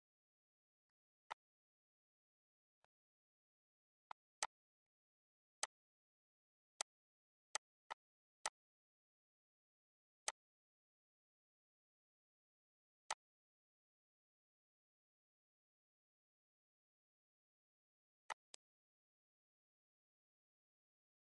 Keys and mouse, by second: 0.1 click, 0.6 shift+click, 1.3 click, 2.1 click, 3.3 click, 4.0 click, 4.4 shift+click, 4.9 click, 5.3 click, 6.7 click, 7.4 click, 8.9 ctrl+s, 9.4 click, 11.3 click, 11.7 ctrl+s, 15.7 ctrl+s, 18.0 click.